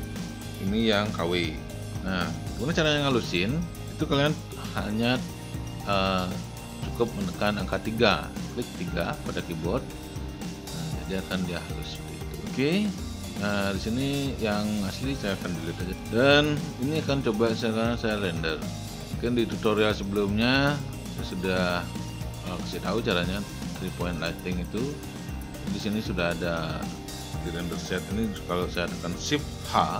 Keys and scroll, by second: 9.1 3, 15.9 Delete.